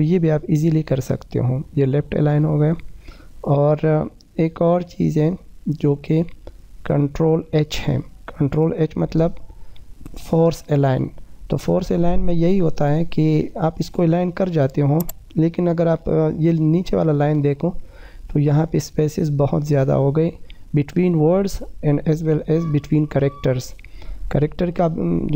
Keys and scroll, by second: 6.1 ctrl+h, 12.8 F2.